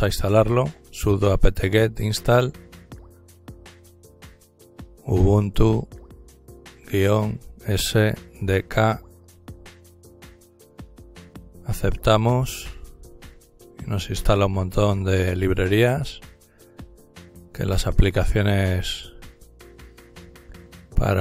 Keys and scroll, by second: 0.0-5.5 typing, 6.7-10.3 typing, 11.5-12.6 typing.